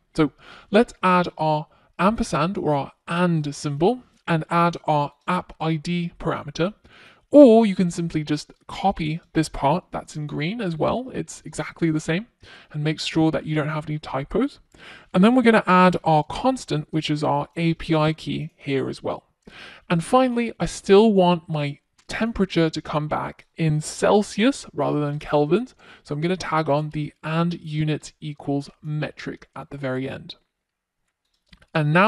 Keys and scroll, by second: 6.6 super+c, 8.0 super+v, 14.4 Return, 20.7 super+c, 22.5 super+v.